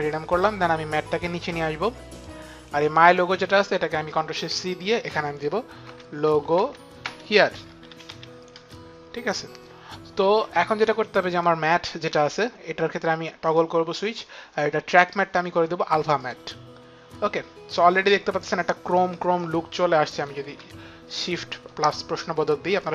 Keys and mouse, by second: 3.0 click, 4.3 ctrl+shift+c, 5.6-8.5 typing, 11.3 click, 13.4 click, 15.1 click, 16.2 click, 17.9 click.